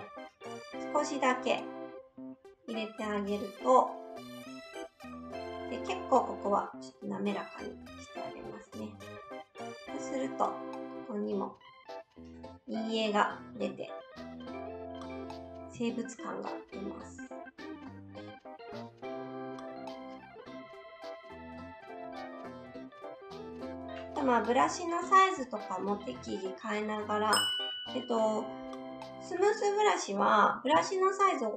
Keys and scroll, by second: 24.6 s, 30.7 shift+s.